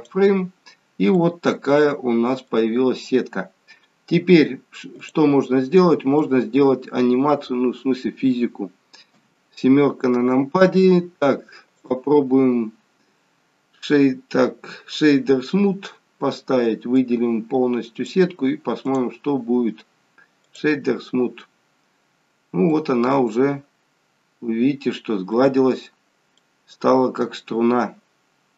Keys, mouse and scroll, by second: 1.2 middle click, 3.0-4.2 scroll down 1, 5.0 click, 6.3 middle click, 9.1 KP_7, 11.7 click, 16.8 click, 19.1 click, 21.1-22.0 scroll up 9, 22.6 middle click, 25.6-26.2 scroll up 3, 26.2 middle click, 26.2 scroll down 1.